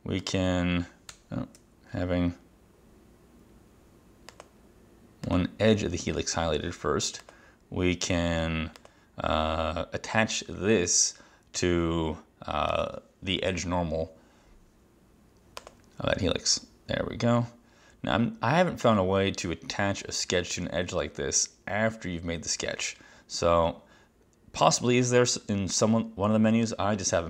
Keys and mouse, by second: 1.2 Escape, 1.7 Escape, 4.4 click, 5.4 click, 7.3 click, 8.9 click, 12.8 click, 15.7 click.